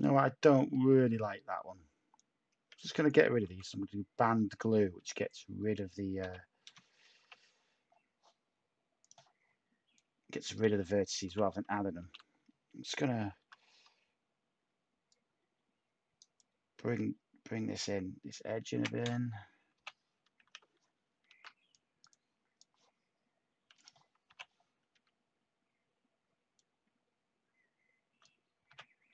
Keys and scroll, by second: 0.5 Tab, 3.4 typing, 4.9 typing, 6.2-6.9 typing, 11.0-12.0 typing, 13.4 h, 19.7-21.2 typing, 24.2-24.9 typing, 28.7-29.1 typing.